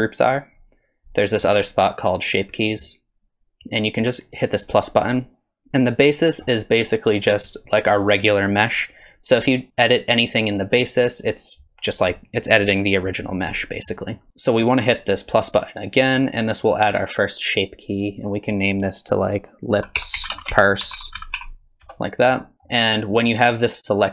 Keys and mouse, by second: 0.1 click, 5.3 click, 18.0 click, 18.2-22.5 drag, 22.5 middle click.